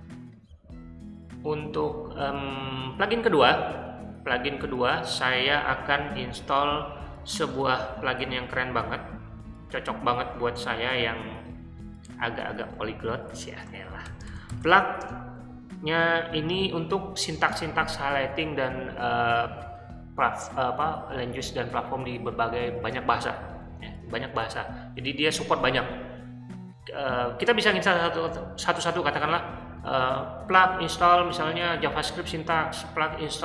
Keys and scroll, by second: 8.1 o, 13.7-15.1 typing.